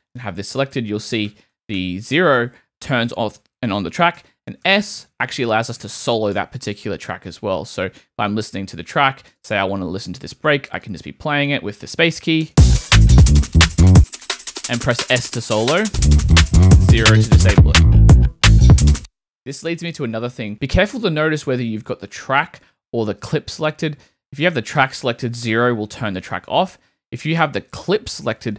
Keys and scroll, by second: 0.7 0, 4.2 s, 12.4 space, 13.9 s, 15.9 s, 16.9 0, 18.6 0, 18.9 space, 25.5 0.